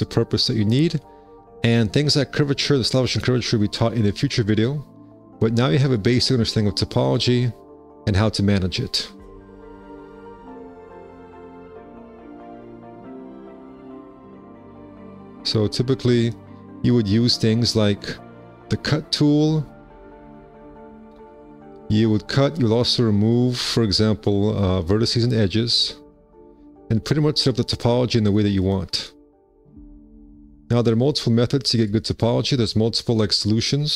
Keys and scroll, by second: 14.1 1, 18.9 alt+c, 27.0 alt+c, 32.9 w.